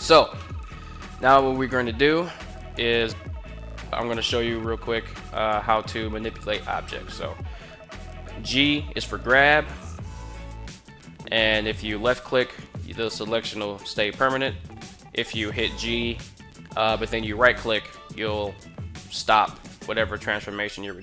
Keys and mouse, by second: 0.2-0.8 middle drag, 6.6-6.9 middle drag, 8.3 g, 11.8 click, 15.3 g, 17.2 right click.